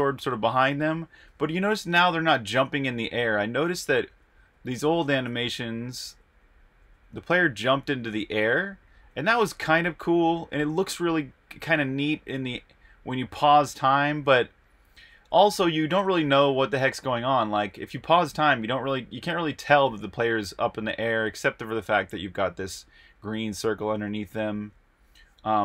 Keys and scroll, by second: 0.0-0.1 typing, 4.2 super+`, 5.0-6.0 typing, 7.5-10.0 typing, 9.7 Right, 10.2 Right, 10.7 Right, 11.0 Right, 11.3 Right, 11.5 Right, 11.7-16.5 typing, 18.0-19.5 typing, 21.3-22.0 typing.